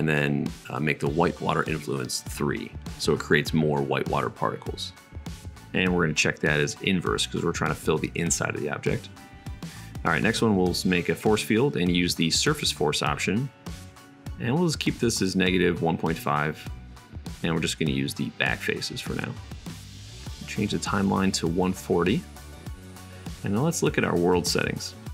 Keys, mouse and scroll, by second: 6.2-9.0 drag, 18.5-21.4 drag, 20.1 super+s, 21.4-22.6 middle drag, 24.1-25.1 drag.